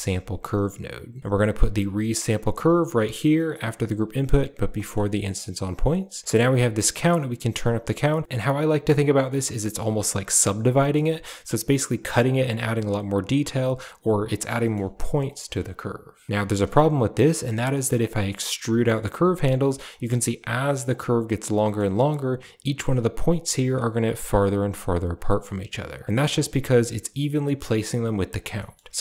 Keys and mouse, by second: 3.9 click, 4.7 middle click, 5.1 click, 5.6 click, 6.4-8.2 drag, 10.8 shift+middle click, 12.4 drag, 14.3 click, 14.5 middle click, 14.7 g, 15.7 click, 16.3 ctrl+z, 16.4 g, 20.0 g, 21.6 shift+middle click, 24.9 g, 27.6 shift+click, 28.5 middle click, 28.9-29.0 drag.